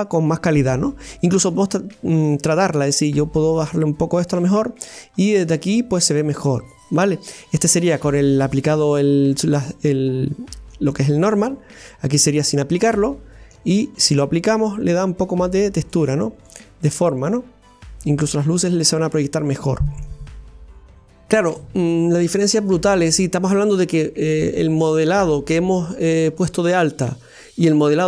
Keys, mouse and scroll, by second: 2.2 right click, 3.8 click, 4.6-5.3 right drag, 5.3-7.8 middle drag, 7.8-8.1 scroll up 1, 8.4-9.1 scroll down 1, 9.1 right click, 10.9-11.9 drag, 11.9 right click, 12.4-13.9 middle drag, 13.9 right drag, 15.0-16.1 drag, 16.1 right click, 16.5-19.5 middle drag.